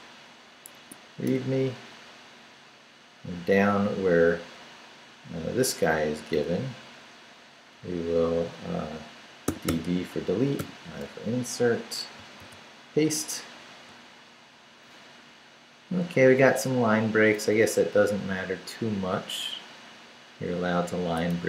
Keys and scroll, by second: 0.0-0.1 typing, 1.0 Tab, 1.3 Return, 3.5 Down, 6.3 Down, 7.8 Down, 9.5 d, 10.6 i, 11.1 Return, 12.4 super+v, 17.6 Left, 21.3 Left.